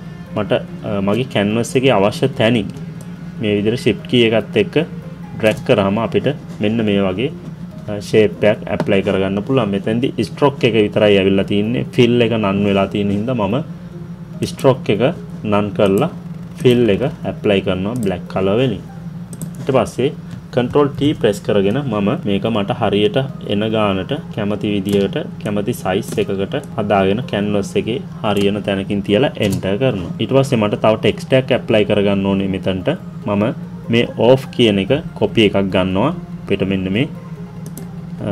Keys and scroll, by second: 20.6 ctrl+t, 29.4 Return.